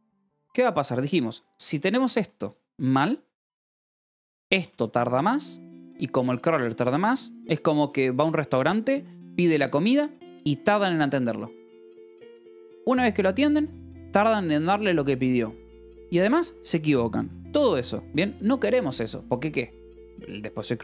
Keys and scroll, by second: 0.9-2.3 typing, 3.3 Escape, 3.4 k, 4.5 k, 17.7 Escape.